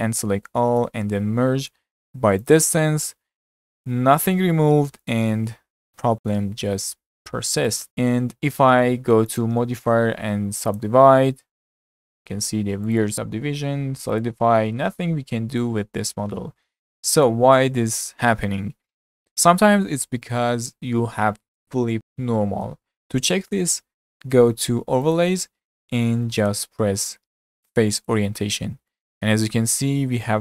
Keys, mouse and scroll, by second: 0.3 a, 1.1 m, 5.4 Tab, 6.3 Tab, 7.5 2, 7.7 click, 10.8-12.3 drag, 12.9 drag, 14.2-16.7 drag, 16.7-19.8 middle drag, 25.1-28.2 drag, 28.9-30.4 middle drag.